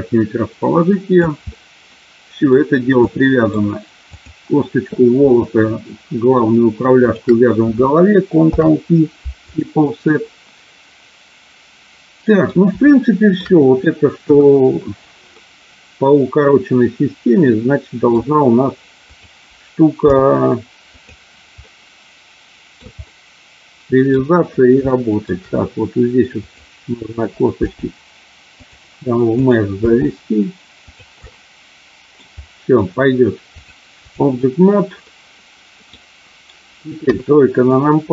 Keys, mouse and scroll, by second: 1.5 middle click, 3.0 middle click, 4.1 click, 8.4 ctrl+p, 10.2-12.5 middle drag, 13.0 shift+middle click, 14.1 KP_1, 15.4-18.1 middle drag, 20.0 g, 20.9 click, 21.6-22.8 middle drag, 23.0-24.1 middle drag, 24.9 shift+middle click, 26.4 click, 27.9 g, 28.5 click, 29.4 click, 30.9 click, 30.9 g, 31.1-32.3 middle drag, 33.8 click, 35.0-36.0 middle drag, 37.0 KP_3, 37.6 middle click.